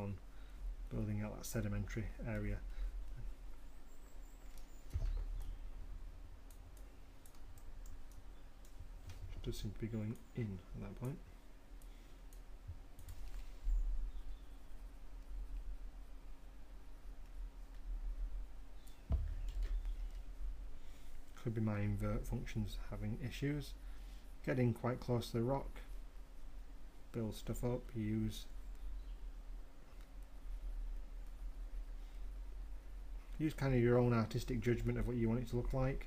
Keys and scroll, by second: 20.5 ctrl+z.